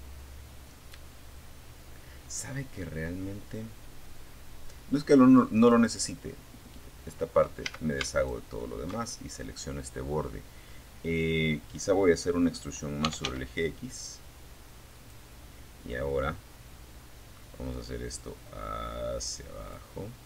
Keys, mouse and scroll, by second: 3.8 click, 5.9 a, 6.3 alt+shift+right click, 8.4 scroll down 2, 11.0-11.9 typing, 13.1 click, 14.1 middle click, 14.7-15.7 right drag, 16.2-18.1 drag, 18.9 right click, 20.1-20.2 drag.